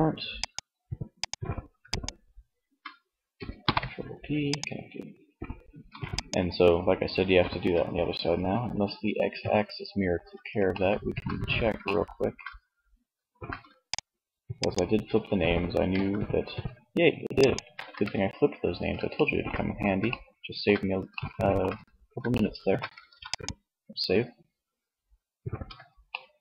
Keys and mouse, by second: 2.7 ctrl+p, 5.3 ctrl+s, 15.1 shift+g, 17.0-18.6 drag, 17.1 ctrl+z, 22.1 ctrl+shift+s, 25.9 Tab.